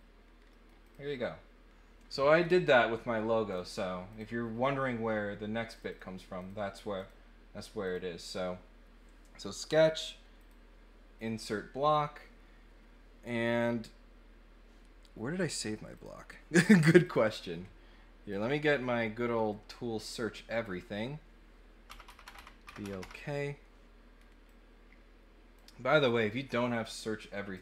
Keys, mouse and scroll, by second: 0.5 middle click, 0.8 click, 3.5 click, 4.1 click, 5.7 click, 5.9 click, 6.4 click, 6.9 click, 7.8 click, 10.4 click, 11.1 click, 15.9 click, 17.0 click, 18.3-20.6 drag, 24.4-25.5 drag, 26.0 click, 27.5 click.